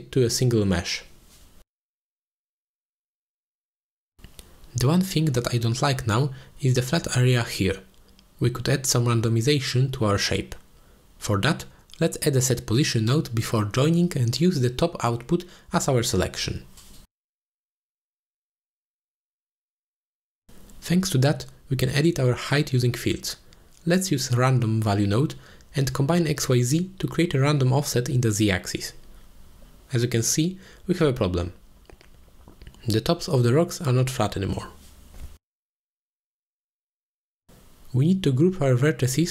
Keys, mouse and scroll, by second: 0.3 shift+a, 3.9-4.3 drag, 4.8 click, 7.0-7.4 middle drag, 8.4-8.8 middle drag, 9.6-11.3 middle drag, 11.8-12.1 shift+middle drag, 13.0 middle drag, 14.3 g, 14.6 click, 15.0 click, 15.2 shift+a, 18.7-19.6 drag, 19.9 click, 20.8 click, 21.9 ctrl+z, 22.5 click, 23.2 shift+a, 27.2-29.5 drag, 30.3-30.7 drag, 31.5-33.5 drag, 33.8-34.1 middle drag, 35.0 ctrl+space, 35.3 middle drag, 36.0-37.0 middle drag, 37.4 ctrl+space, 37.7-38.0 middle drag, 38.6 shift+middle click.